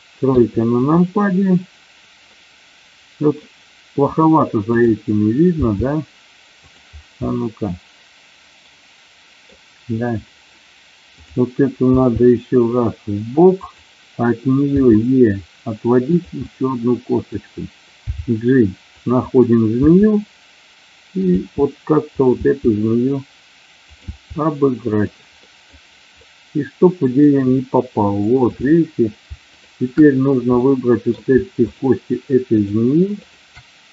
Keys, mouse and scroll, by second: 0.2 KP_3, 2.3-3.1 scroll up 1, 3.1 middle click, 4.6 click, 5.6 g, 6.6 click, 7.3-11.1 middle drag, 11.1 click, 12.0 g, 13.5 click, 14.6 e, 16.0 click, 16.4 middle click, 18.0 g, 18.9 click, 19.8 e, 21.1 click, 21.2 e, 22.1 click, 22.3 e, 24.0 e, 24.8 click, 25.5 middle click, 26.2 middle click, 28.7 click, 29.5 shift+click, 30.5 middle click, 32.5 shift+click.